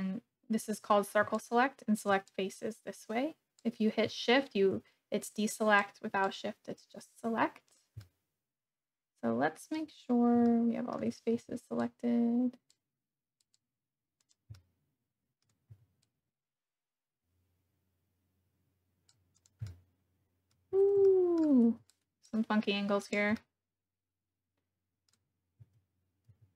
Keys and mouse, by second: 2.3-3.7 drag, 5.8 click, 7.7 click, 8.0-9.8 middle drag, 10.5 shift+middle click, 11.3 c, 13.4 click, 14.2 click, 14.5 middle click, 15.7 c, 19.3 click, 19.6 middle click, 21.1 shift+middle click, 21.7 c, 23.0 click, 23.4-25.1 middle drag, 26.2 c.